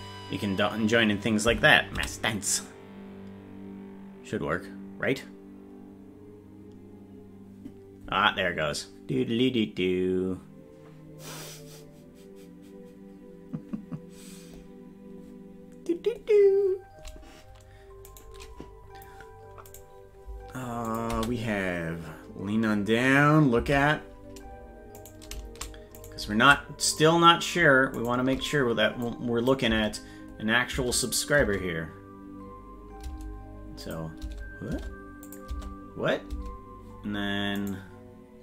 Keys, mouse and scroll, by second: 18.2 right click, 19.7-20.9 right drag, 20.9 click, 21.1 space, 24.7 space, 25.0 right click, 26.2-28.2 right drag, 29.0 click, 29.7 space, 31.1 click, 31.1 space, 31.4 space, 33.8 click, 33.8 space, 35.3 click, 35.5 space, 37.7 right click, 37.7 space.